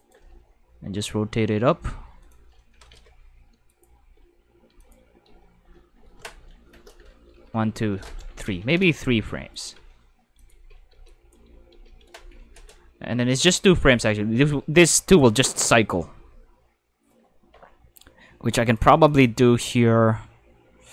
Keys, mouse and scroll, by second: 0.1 r, 2.2 click, 2.7 Tab, 3.7 click, 4.0 space, 4.8 click, 5.2 space, 8.0 click, 8.6 shift+s, 9.5 click, 9.7 space, 10.4 click, 10.5 space, 11.0 click, 13.4 click, 14.1 click, 18.7 click, 19.0 click, 19.6 click.